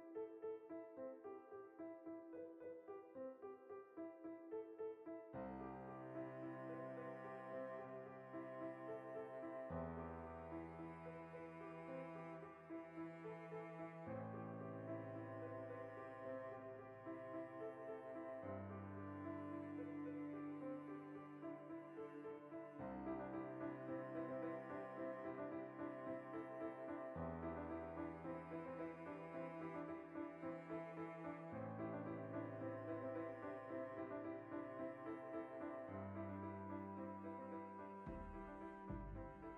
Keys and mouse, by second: 0.0 g, 0.6 click, 0.7 middle click, 1.0 right click, 1.2 g, 1.6 click, 1.7-3.3 middle drag, 3.0 ctrl+z, 3.3 right click, 3.6-6.9 middle drag, 3.9 g, 4.2 click, 4.3 right click, 4.4 g, 4.8 click, 6.9 right click, 7.1 g, 7.6 right click, 7.8 g, 8.1 click, 8.2 middle click, 9.0 right click, 9.2 g, 9.5 click, 9.7 right click, 9.8 g, 10.1 click, 10.3-13.9 middle drag, 13.9 alt+right click, 14.1 ctrl+middle click, 14.4 shift+right click, 15.1 KP_Decimal, 15.3-17.2 middle drag, 17.2 right click, 17.6 g, 18.0 click, 18.2-21.2 middle drag, 19.0 KP_Decimal, 21.2-22.6 right drag, 22.6 g, 22.9 click, 23.2 KP_Decimal, 23.4-31.1 middle drag, 25.7 ctrl+r, 29.7 ctrl+r, 31.1 right click, 31.8 shift+middle click, 33.5 s, 34.9 click, 36.0 s, 37.8 click, 38.0 1, 38.8-39.5 shift+middle drag.